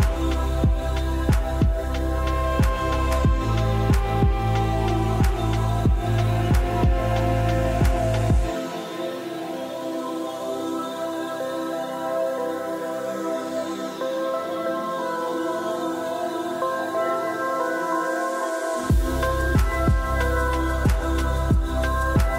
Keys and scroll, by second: 12.8-15.6 typing, 17.7 1, 20.2 1.